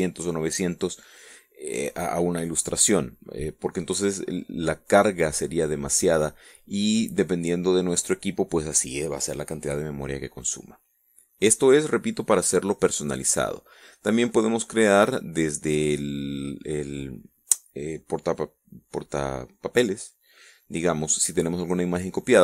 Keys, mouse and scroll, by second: 15.0 click.